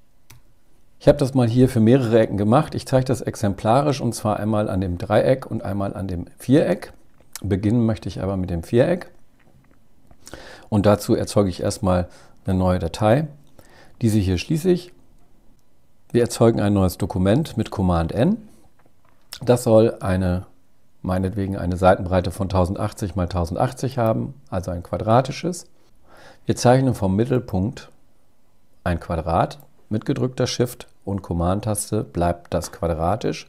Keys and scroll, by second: 16.9 super+n.